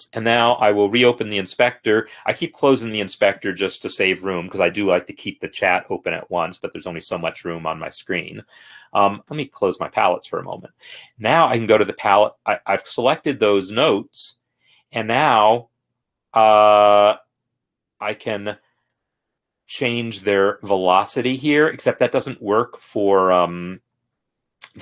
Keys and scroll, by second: 1.2 F8.